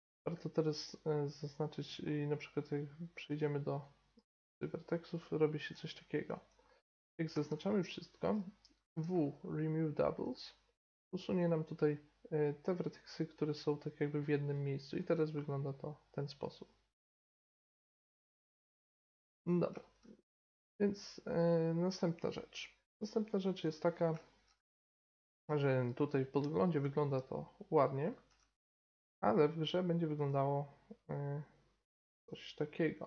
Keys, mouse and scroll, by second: 1.8-3.5 right drag, 3.2 click, 3.5 middle click, 4.2 g, 5.0-6.7 right drag, 5.7 g, 7.3 a, 7.5 a, 8.9 w, 12.6 middle click, 13.5-16.4 right drag, 15.0 g, 17.2 middle click, 19.1 Tab, 21.3-22.6 drag, 23.6-25.6 right drag, 25.6-28.1 middle drag, 28.3 t, 30.2 click, 32.8-33.0 drag.